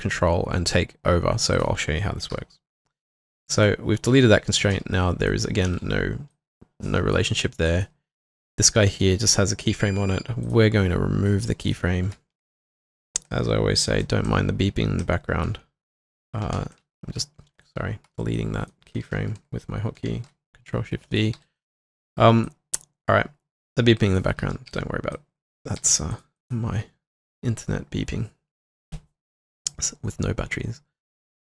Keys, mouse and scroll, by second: 2.3 Delete, 3.5 double click, 4.7-6.2 typing, 15.5 ctrl+shift+n, 16.6 ctrl+shift+v, 17.6 alt+middle click, 18.6 shift+click, 21.1 middle click, 21.4 typing, 24.4-24.7 typing, 25.8 typing, 26.4 double click.